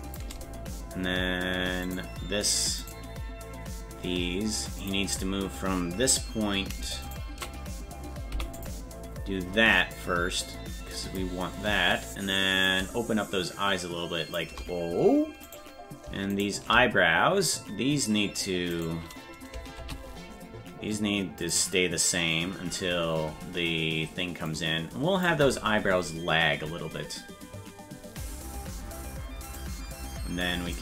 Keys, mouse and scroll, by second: 2.0 right click, 3.1-4.8 right drag, 4.8 click, 7.3 shift+right click, 8.3 i, 9.9-11.2 drag, 12.6-14.4 drag, 15.7-17.7 right drag, 18.7 right click, 19.8 shift+d, 24.5 click, 29.6 right click, 30.7 click.